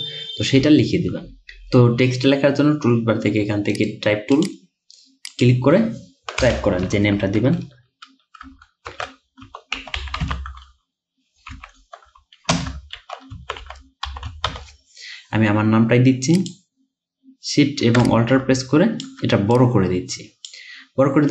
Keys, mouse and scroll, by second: 0.1-0.5 alt+scroll up 1, 1.2 alt+scroll down 1, 3.8 right click, 6.5 BackSpace, 8.9-16.3 typing, 18.1 alt+shift+click.